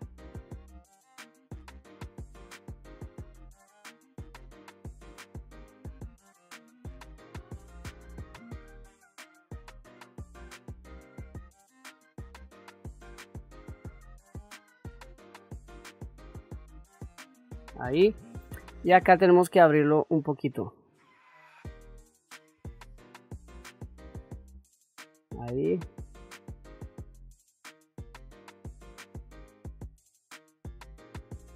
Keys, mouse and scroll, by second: 0.3 ctrl+z, 0.7 click, 1.6 ctrl+z, 2.4 click, 3.0 ctrl+z, 3.2 click, 3.6 ctrl+z, 4.0 shift+middle click, 4.7 click, 5.4 ctrl+z, 5.6-7.7 drag, 8.3-9.6 drag, 10.0-11.1 drag, 11.4 click, 12.1 ctrl+middle click, 12.4 ctrl+middle click, 13.0 ctrl+middle click, 13.2 middle click, 13.4 ctrl+middle click, 13.6 middle click, 13.9 KP_1, 14.2 ctrl+middle click, 14.9 f, 15.3 click, 16.1 ctrl+z, 16.4 click, 20.2-24.5 drag, 25.7-28.8 drag, 29.8-31.5 drag.